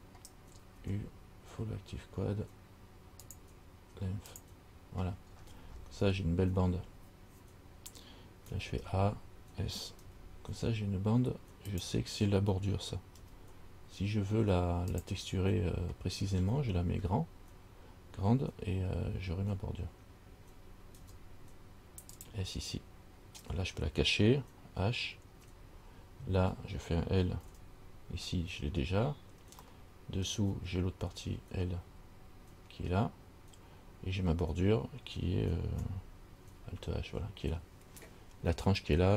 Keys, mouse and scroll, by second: 1.0 u, 5.5-8.7 scroll down 11, 8.7 scroll down 1, 8.7 a, 9.0 a, 10.2 s, 13.4 g, 16.4-18.9 scroll up 7, 21.2 s, 25.5 h, 27.7 l, 29.9 middle click, 32.1 l, 36.7 alt+h.